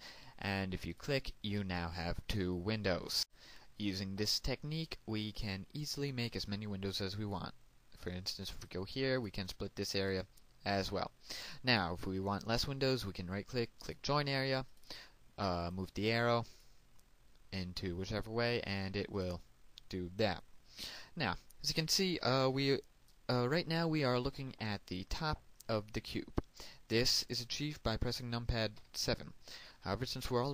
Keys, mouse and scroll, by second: 8.8 right click, 9.4 click, 13.1 right click, 14.1 click, 15.8 right click, 16.8 click, 29.0 KP_7.